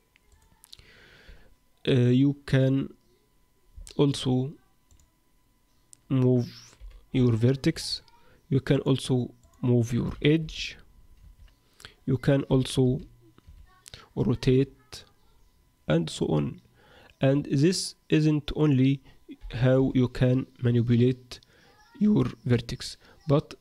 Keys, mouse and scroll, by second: 0.3 click, 3.8 middle click, 4.9 click, 6.8 g, 8.7 click, 9.4 click, 10.1 g, 12.4 g, 14.4 r, 18.1 click, 18.6 click, 19.4 g.